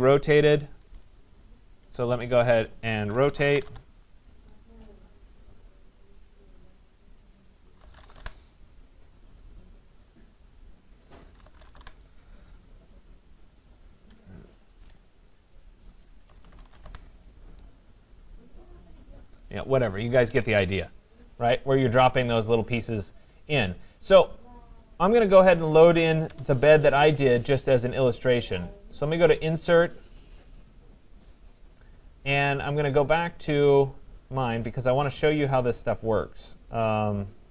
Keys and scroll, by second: 1.8 Escape, 3.6 Return, 16.8 Return, 20.2 Escape, 26.2 Delete.